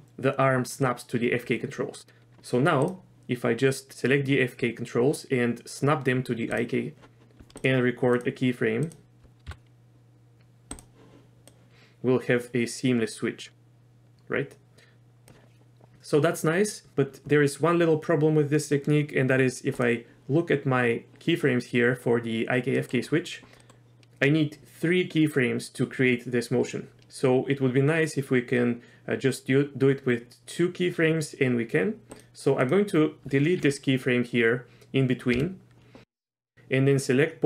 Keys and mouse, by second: 2.8 click, 8.1 shift+click, 8.9 shift+click, 9.4 i, 11.5-15.3 drag, 19.7 drag, 22.8 middle click, 23.6 middle click, 32.1 click, 32.6 click, 35.3 Delete, 36.0-37.4 drag.